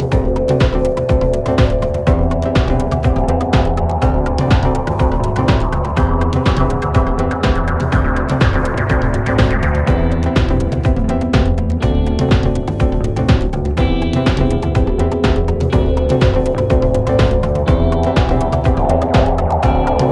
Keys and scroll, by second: 5.9 t, 6.3 shift+i, 7.3 ].